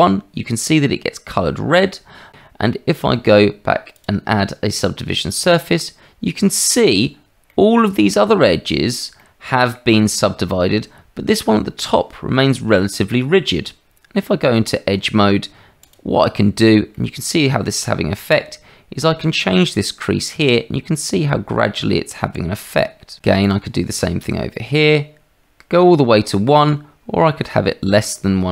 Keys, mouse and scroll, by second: 2.5 Tab, 7.5-8.1 middle drag, 9.1-9.7 middle drag, 13.4 Tab, 15.8 click, 16.9 middle click, 19.3-23.2 drag, 24.5-28.5 drag.